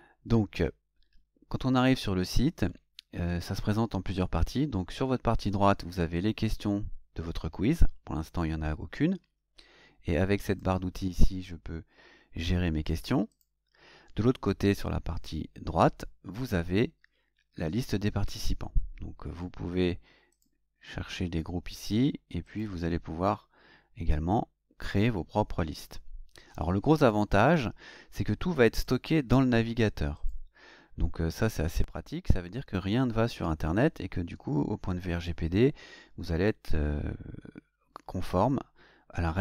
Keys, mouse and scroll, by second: 10.5 click, 13.3 click, 20.3 click, 22.5 click, 27.0 click, 28.8 click, 30.2 click.